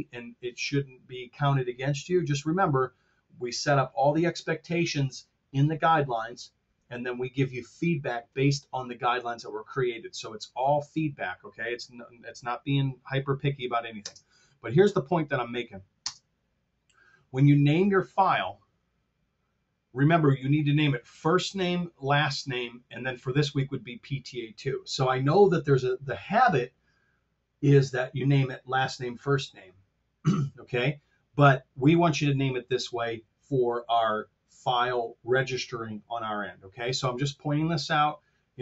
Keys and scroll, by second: 13.9 shift+space, 15.9 space.